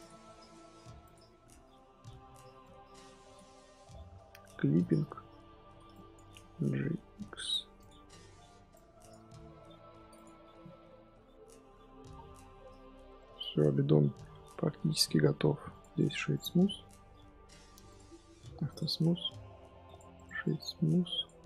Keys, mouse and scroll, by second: 1.1-3.4 drag, 4.7-5.3 drag, 5.3 Tab, 6.1 click, 6.2 g, 9.0 click, 9.1 g, 10.2 Tab, 10.6 z, 10.7-11.1 middle drag, 11.1 z, 11.3 scroll down 2, 11.5-12.0 middle drag, 12.0-12.6 scroll down 4, 12.6-14.1 middle drag, 14.1-15.7 scroll up 1, 15.7 click, 16.3-18.6 right drag, 18.6-19.9 drag, 21.2 right click, 21.3-21.4 scroll up 3.